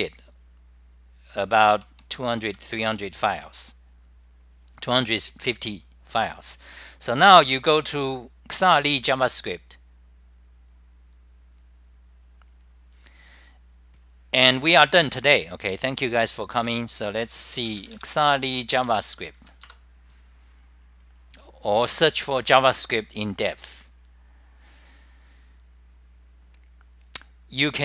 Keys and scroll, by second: 0.7-4.2 typing, 2.4 Home, 3.7 scroll up 10, 6.3-7.0 typing, 6.5 scroll up 10, 11.1-11.8 typing, 11.3 scroll up 10.